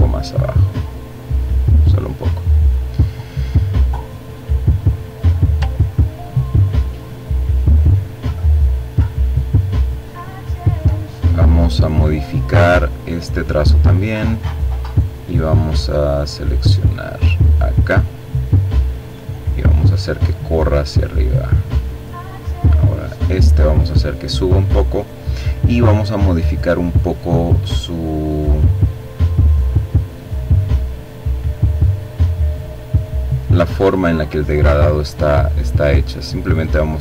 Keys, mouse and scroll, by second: 0.6-1.2 scroll down 1, 1.2-1.9 scroll up 2, 2.7-3.9 drag, 4.3-4.8 ctrl+scroll down 2, 5.8-7.5 ctrl+drag, 7.5-8.2 ctrl+scroll up 3, 8.7-9.2 scroll down 2, 9.9 click, 10.9 click, 14.4-16.1 drag, 17.0-18.9 drag, 19.0-20.7 drag, 26.6-31.2 drag, 32.0 click, 34.8-37.0 drag.